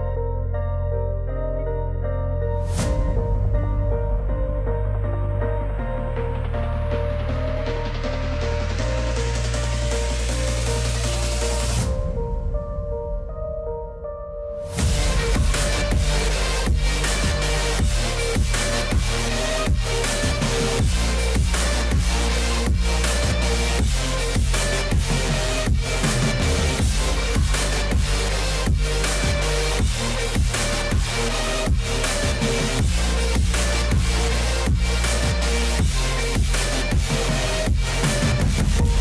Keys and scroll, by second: 17.4 F4, 34.8 F4.